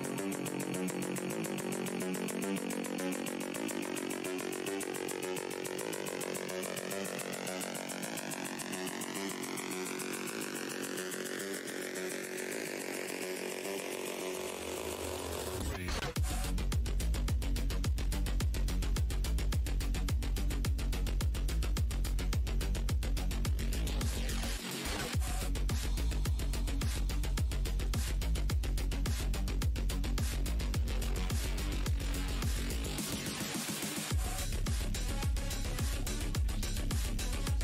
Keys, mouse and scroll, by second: 2.7 click, 4.0 shift+click, 4.4-8.0 typing, 8.1 click, 11.5 click, 13.2 shift+click, 14.5 shift+click, 15.7 shift+click, 16.2 shift+right click, 16.8 alt+click, 18.6 alt+click, 19.3 w, 20.0 w, 20.9 click, 21.5 scroll down 1, 21.8 alt+shift+w, 23.1 alt+click, 23.5-24.2 scroll up 2, 24.9 right click, 25.5 click, 26.3 shift+click, 27.3 click, 29.7 click, 30.6 shift+click, 31.3 shift+right click, 32.9 w, 33.2 space, 34.0 click, 34.4 scroll down 2, 34.6 alt+shift+w, 35.5-36.0 alt+scroll down 1, 36.4-37.6 scroll up 1.